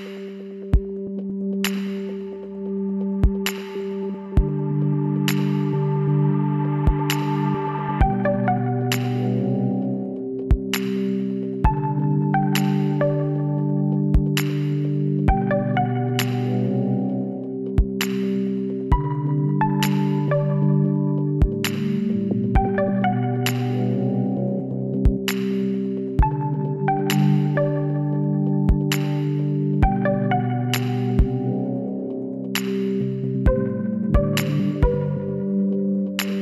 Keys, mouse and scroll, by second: 1.6-3.6 middle drag, 4.5 Tab, 5.4 click, 5.7 z, 5.9-8.6 middle drag, 15.3 n, 16.6-18.8 middle drag, 18.8-21.5 drag, 21.1 n, 21.6-25.9 middle drag, 28.8 KP_3, 29.6-30.9 middle drag, 31.7 middle click, 32.3 middle click, 32.6 KP_3, 33.4 KP_1, 34.4 middle click, 34.8 middle click.